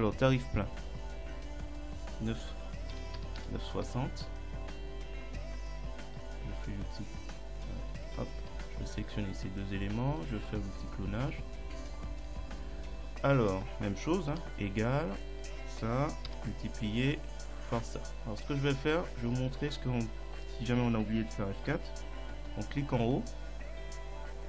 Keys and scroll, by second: 3.0 9, 3.2 ., 3.4 6, 3.8 Return, 8.0 Escape, 14.4 =, 16.3 *.